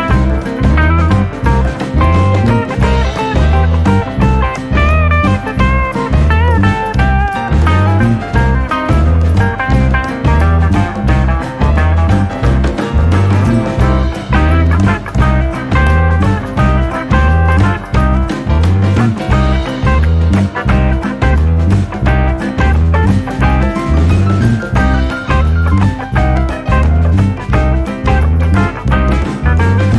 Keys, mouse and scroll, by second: 0.1 click, 5.3 click, 9.2 click, 11.2 click, 13.5 KP_Decimal, 15.8 Tab, 17.5-18.8 shift+middle drag, 18.8-19.6 scroll up 7, 19.8-20.8 shift+middle drag, 20.8 scroll up 1, 21.3 scroll down 1, 23.4 click, 24.1 click, 25.1 click, 25.7 click.